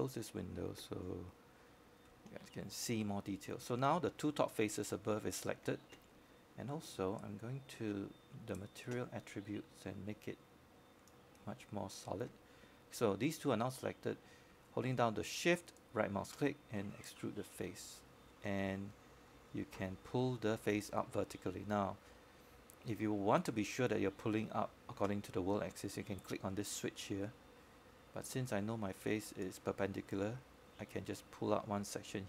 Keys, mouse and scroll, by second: 1.4-2.7 right drag, 3.2 click, 5.4 shift+click, 10.7 alt+middle click, 12.2 scroll up 1, 12.6 alt+middle click, 13.2 scroll down 1, 13.4 alt+middle click, 15.7-17.7 right drag, 19.7 click, 24.5 shift+right click.